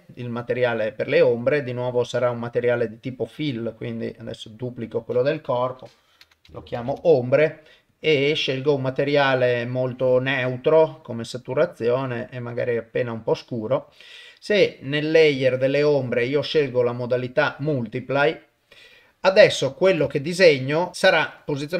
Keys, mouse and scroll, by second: 0.7 click, 1.4-2.4 drag, 3.4 click, 4.6 click, 4.8-6.9 drag, 7.9 click, 14.9 click, 16.4-18.3 drag, 19.5 ctrl+middle click, 20.1 shift+middle click.